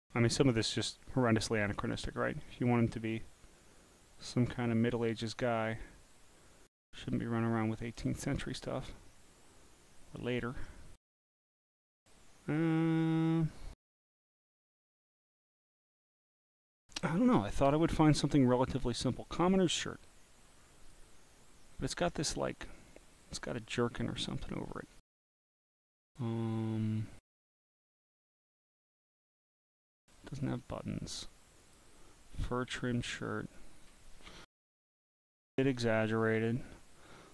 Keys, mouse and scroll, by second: 0.6 scroll up 1, 2.4 scroll down 2, 4.7 scroll down 1, 4.8 scroll up 1, 5.8 scroll up 1, 7.3 scroll up 1, 8.3 scroll down 1, 9.1 scroll down 1, 9.9 scroll down 1, 14.5-15.4 scroll up 2, 18.8 click, 19.8-21.0 drag, 22.5-24.3 drag, 25.2 scroll up 1, 30.4 scroll up 2, 31.6 click, 32.3-33.6 drag, 35.2 scroll down 2, 36.3 scroll down 1.